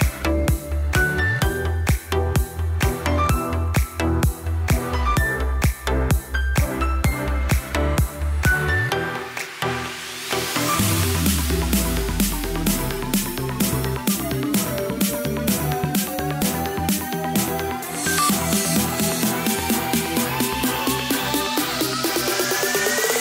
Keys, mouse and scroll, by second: 0.5 shift+d, 1.7 s, 3.6 s, 5.3 shift+z, 5.4 shift+z, 5.6 click, 5.9 scroll down 1, 6.1-6.7 middle drag, 6.7 click, 7.2-7.6 scroll down 1, 7.6 click, 8.0-9.1 middle drag, 9.1 click, 9.5-13.0 shift+middle drag, 13.0-13.9 drag, 16.0-17.2 drag, 17.2 KP_1, 19.2 shift+a, 20.1 click, 21.2-21.5 scroll up 4, 21.5 shift+middle click, 22.0 s.